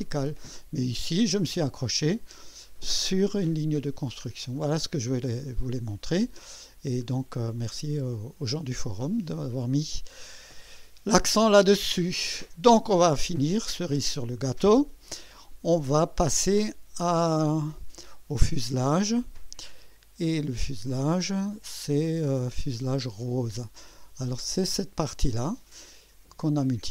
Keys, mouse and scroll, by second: 4.3 scroll down 2, 4.8 click, 5.6-6.3 drag, 7.0 scroll up 2, 7.6-8.3 right drag, 8.4-9.4 drag, 9.8 scroll up 1, 11.1-12.3 drag, 12.4 scroll down 1, 13.3-14.0 right drag, 20.8-21.1 scroll down 1, 21.7 scroll up 1, 23.3 click, 24.0 click, 24.3 space, 25.3 click, 25.9-26.5 drag.